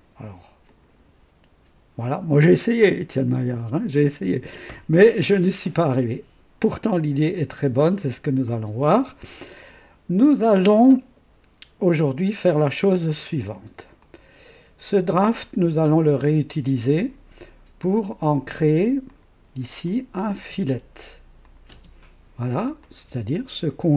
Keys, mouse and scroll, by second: 0.7 click, 14.0 click, 19.0 click, 19.8 click, 20.3 space, 21.4 click, 21.7 space, 22.8-23.9 drag.